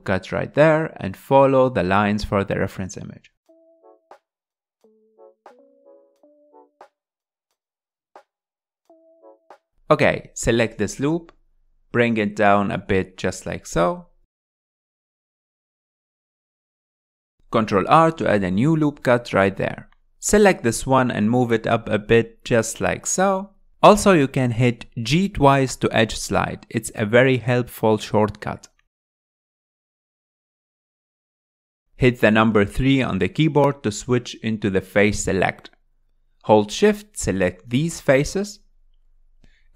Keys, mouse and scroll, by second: 3.0 g, 5.2 s, 9.0 click, 9.7 alt+z, 10.2 click, 11.5 click, 12.2 g, 13.9 s, 15.3 s, 16.6 click, 17.9 ctrl+r, 21.7 click, 23.6 click, 27.3 ctrl+z, 28.3 g, 32.7-33.1 scroll down 3, 33.4 alt+z, 33.8 middle click, 34.5 3, 34.9-36.0 middle drag, 36.0 shift+click, 36.5 shift+click, 37.3 shift+click, 37.8 shift+click, 38.2 shift+click, 38.8-39.7 middle drag.